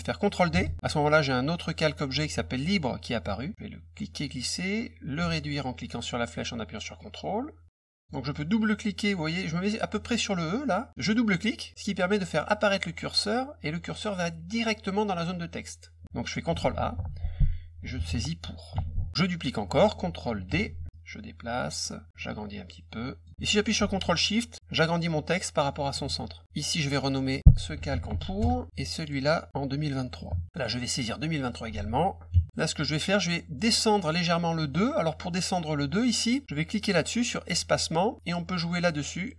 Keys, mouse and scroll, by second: 0.6 ctrl+d, 3.5 click, 6.0-8.0 ctrl+drag, 11.7 click, 16.5 ctrl+a, 17.5-18.7 typing, 20.4 ctrl+d, 20.9 click, 22.1-23.2 ctrl+drag, 23.3-25.6 drag, 26.9 click, 27.0 click, 27.4-28.5 typing, 29.0 click, 29.1 click, 30.5 click, 31.3 click, 31.5 click, 31.7 ctrl+a, 32.9 click, 36.7 click.